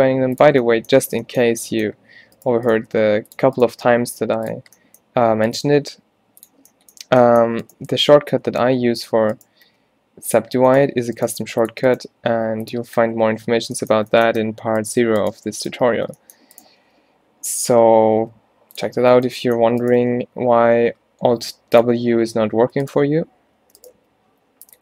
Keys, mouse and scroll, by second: 3.0 g, 3.9 g, 5.7 g, 8.0 g, 9.7 g, 11.4 g, 12.0 g, 16.0 alt+w, 16.9 g, 20.1 g, 23.7 alt+w, 24.0 g.